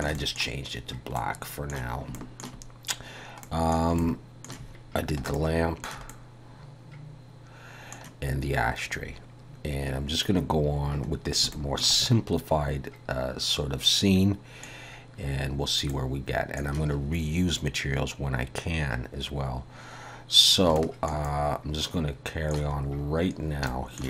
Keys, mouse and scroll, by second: 0.2 middle click, 1.2 middle click, 2.2 shift+middle click, 3.0-3.5 scroll down 2, 3.5 middle click, 4.0 shift+middle click, 6.0 middle click, 6.1 middle click, 9.7-10.1 scroll down 1, 10.5-10.9 scroll down 1, 11.3 scroll down 1, 11.5 shift+middle click, 12.0 middle click, 15.9 middle click, 19.3-19.7 scroll up 2, 20.5 scroll down 1, 20.8 shift+middle click, 21.3 middle click, 22.8-23.7 scroll up 5, 23.7 shift+middle click.